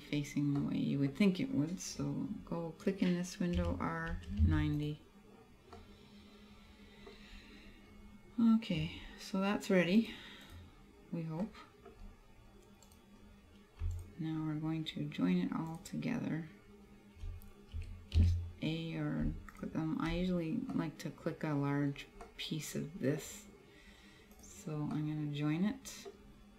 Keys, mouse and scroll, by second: 0.1-0.6 scroll down 2, 0.6 middle click, 3.7 r, 4.9 click, 5.8 middle click, 7.2-7.6 scroll down 2, 7.7 scroll up 2, 10.0 click, 11.5 middle click, 12.1-12.9 scroll down 1, 12.9 scroll down 1, 13.1 right click, 14.1 shift+right click, 15.9 right click, 17.9 a, 18.3 a, 19.6 shift+right click, 20.8 middle click, 22.3 middle click, 24.5 click, 25.0 middle click.